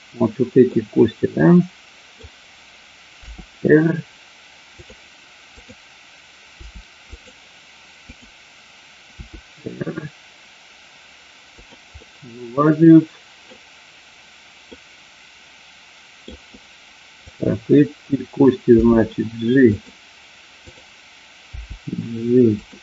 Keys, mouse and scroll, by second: 0.6-2.1 middle drag, 3.1 r, 4.8-6.0 drag, 6.5 r, 7.2 click, 8.0 click, 9.2 r, 11.5 click, 11.9-13.5 middle drag, 14.8-16.2 middle drag, 17.3 click, 18.7 g, 19.7 click, 20.5 click, 22.1 g, 22.5 click.